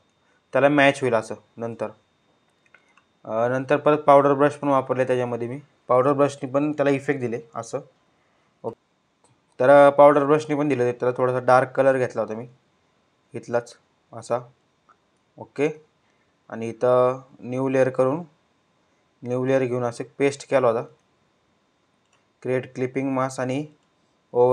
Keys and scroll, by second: 5.7 ].